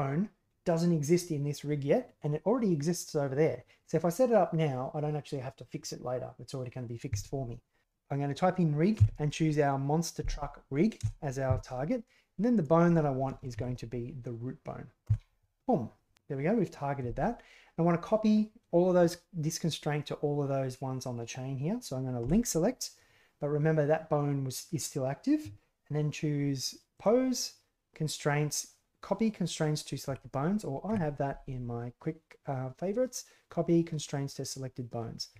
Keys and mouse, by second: 12.5-15.5 drag, 26.9-30.2 drag, 30.8 q.